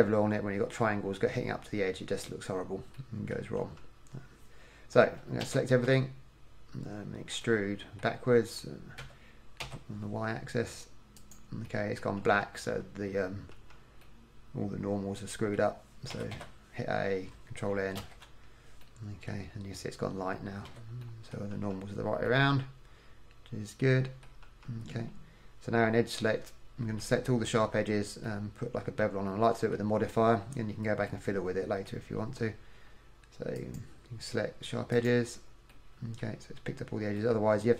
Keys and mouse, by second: 3.7 KP_1, 5.6 a, 6.0 a, 9.2 e, 12.4 KP_1, 12.9 KP_3, 13.7 KP_1, 16.3 a, 16.5 a, 18.1 ctrl+n, 20.8 a, 21.7 KP_1, 24.6 KP_1, 30.7 middle click.